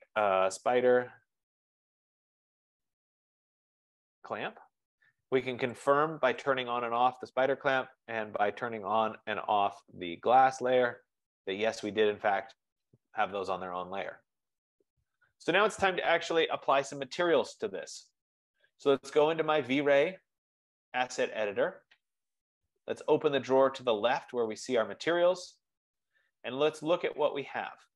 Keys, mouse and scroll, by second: 0.4-4.0 typing, 5.8-6.6 typing, 6.0 click, 6.7 click, 9.1 click, 10.7 click, 11.3 click, 20.9-23.3 drag, 24.0 click.